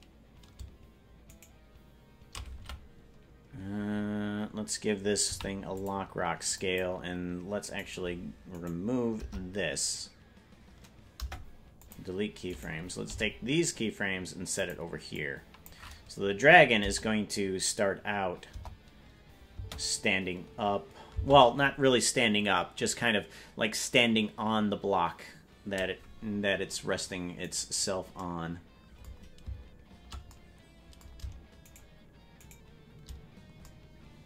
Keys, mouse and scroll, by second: 1.5 shift+right click, 2.6 a, 5.2 i, 6.6 click, 7.6-9.1 right drag, 9.1 BackSpace, 11.1 Delete, 12.5 right click, 13.0 g, 15.2 click, 18.5 KP_0, 19.5 space, 21.2 space, 27.7 right click, 31.9 shift+right click, 32.7 shift+right click.